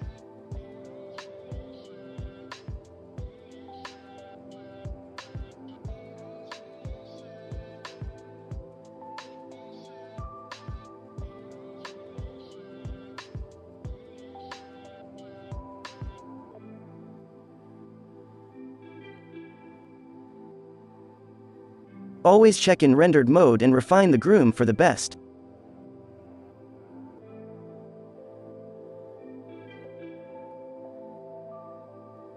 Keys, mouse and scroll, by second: 5.7-7.1 drag, 7.2-8.5 drag, 8.8 z, 9.1 click, 9.2-10.9 middle drag, 9.3 alt+a, 10.9 middle click, 13.4-15.4 drag, 17.8-18.9 drag, 20.4 click, 21.0 z, 22.1-24.0 right drag, 24.0 drag, 24.4 f, 25.0 f, 25.7 f, 26.2-29.2 drag, 27.0 n, 28.3 f, 29.7 f.